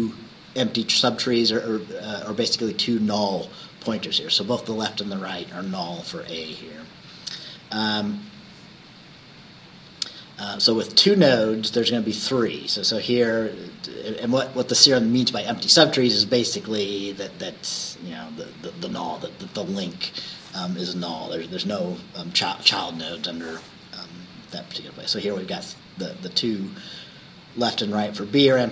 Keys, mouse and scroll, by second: 7.9 Right.